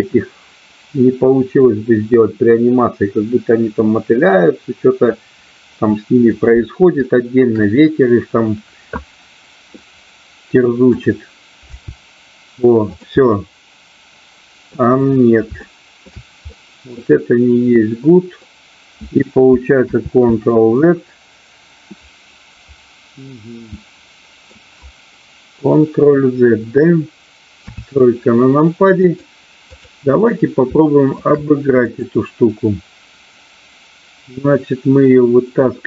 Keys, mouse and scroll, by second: 7.0 shift+middle click, 9.8-11.0 middle drag, 11.6 g, 13.0 click, 13.2-15.5 middle drag, 15.6 shift+middle click, 16.5-18.5 middle drag, 21.2 ctrl+z, 23.3-24.5 middle drag, 27.6 KP_3, 29.1 click, 30.7 shift+middle click, 32.0 click.